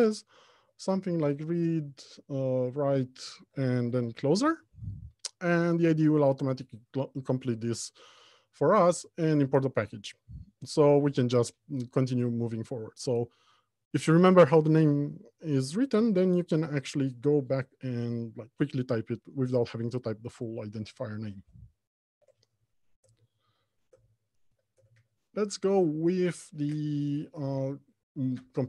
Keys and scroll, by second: 9.3 Return, 22.4 alt+Home, 22.8 Left, 23.2 Return.